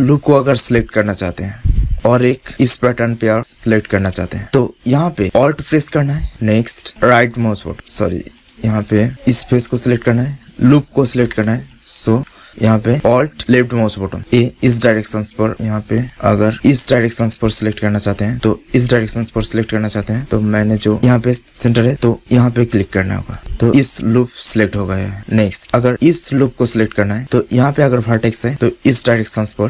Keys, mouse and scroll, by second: 6.8 click, 7.2 right click, 7.7-10.4 drag, 9.0-10.4 right drag, 11.7-14.1 drag, 14.1 right click, 14.5 click, 14.5 right click, 15.9 click, 16.5 middle click, 16.8-19.6 drag, 20.1 middle click, 22.1-23.7 drag, 23.8-25.1 drag, 23.8-25.1 right drag, 25.1-26.2 middle drag, 27.1-28.7 drag.